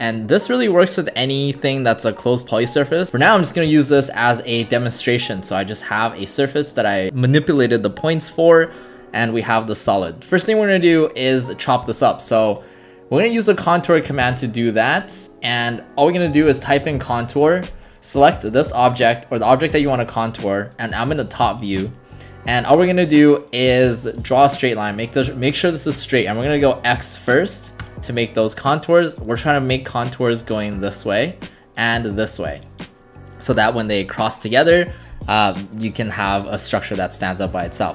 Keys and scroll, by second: 14.2 ctrl+alt+s, 16.1-17.4 typing, 21.8 space.